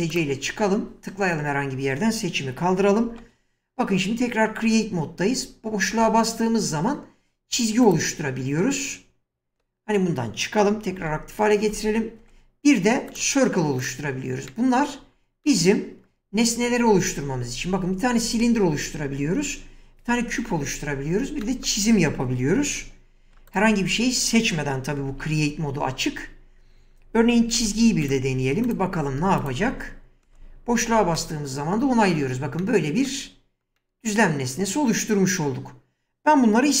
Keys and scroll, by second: 3.1 ctrl+x, 5.9 space, 9.5 Escape, 11.0 ctrl+x, 11.7 space, 25.1 ctrl+x, 27.6 space.